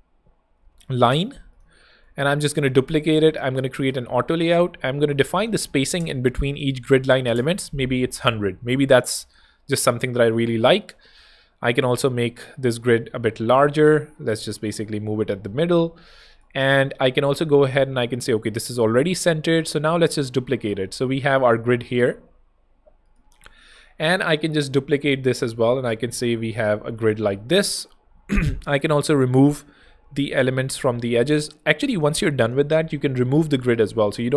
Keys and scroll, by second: 1.2 super+z, 1.8 z, 2.5 super+d, 3.1 shift+super+a, 3.4-7.0 typing, 7.2 Return, 10.8 Return, 13.6 alt+shift+h, 13.8 alt+v, 14.8 alt+super+v, 19.6 super+d, 24.7 super+d, 25.4 shift+super+d, 27.2 shift+Escape, 28.1 super+Escape, 29.0 super+x, 30.7 super+z.